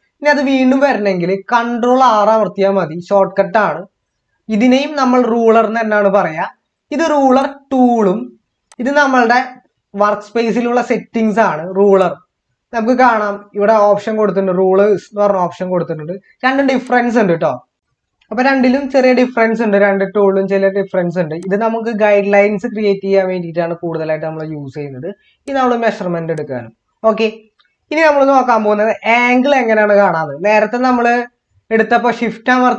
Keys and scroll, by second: 2.1 ctrl+r.